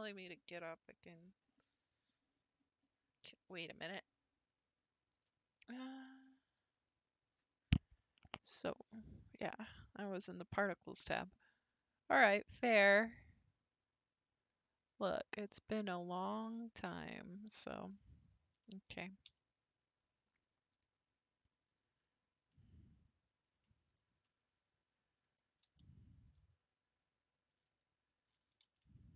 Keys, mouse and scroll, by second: 5.1 click, 6.5 click, 9.6 click, 11.4-12.7 drag, 14.9 click, 18.7 a, 19.3 s, 22.0-22.5 scroll down 3, 22.5-25.6 middle drag, 25.6 s, 28.4 s.